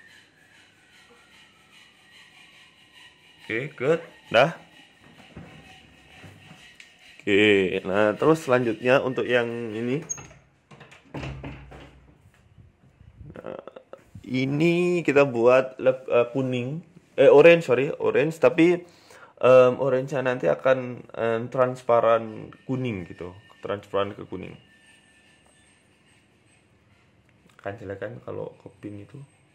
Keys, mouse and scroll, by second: 1.0 click, 3.9 right click, 4.4 g, 7.3 click, 7.3 click, 8.0 click, 8.3 click, 10.9 Tab, 11.4-13.0 typing, 14.3 click, 16.8 click, 17.2 Tab, 18.7-19.0 scroll up 4, 19.4 shift+middle click, 20.8 click, 26.9 click, 29.0 click.